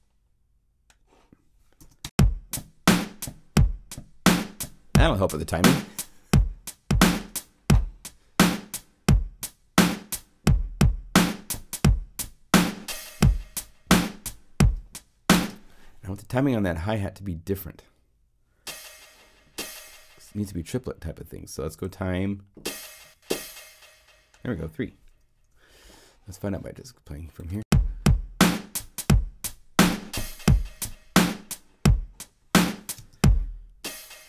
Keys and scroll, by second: 1.8 0, 2.0 Home.